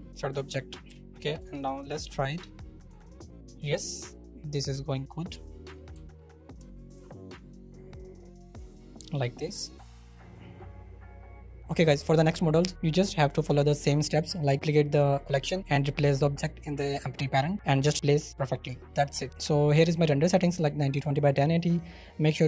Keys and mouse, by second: 0.9 KP_1, 2.3-5.6 drag, 5.6 middle click, 5.9 z, 6.8 shift+middle drag, 7.5-8.7 middle drag.